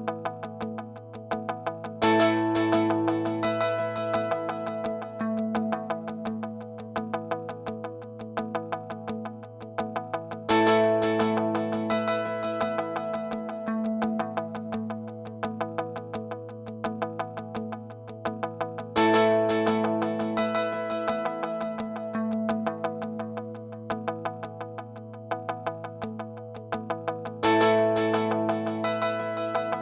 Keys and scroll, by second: 0.0-0.3 typing, 16.0-19.7 typing.